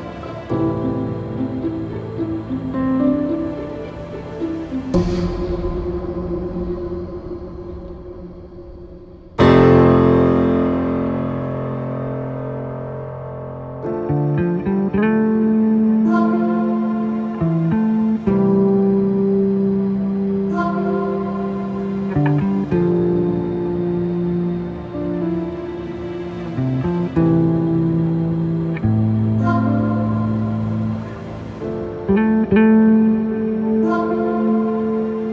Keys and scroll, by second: 7.1 space, 12.8 ctrl+z, 13.2 ctrl+z, 14.7 ctrl+z, 17.0 space, 22.1 Right, 22.7 space, 23.5 ctrl+-, 23.8 space, 32.2 ctrl+z.